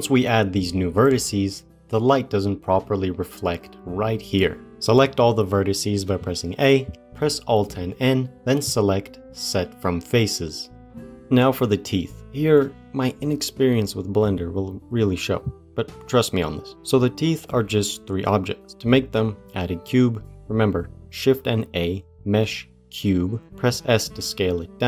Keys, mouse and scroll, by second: 0.8-1.5 scroll up 1, 1.7 scroll up 1, 4.4-4.9 scroll down 1, 4.9 a, 7.9 alt+n, 21.3 shift+a, 23.5 s.